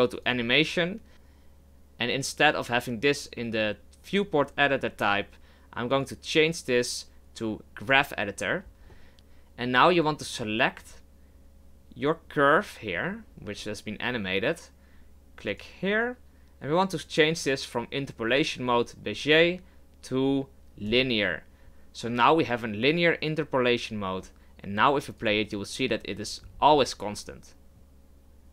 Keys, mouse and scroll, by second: 0.3-1.9 drag, 9.1-15.6 right drag, 15.6-26.4 drag, 26.4-27.1 scroll up 5, 27.1-28.5 scroll down 2.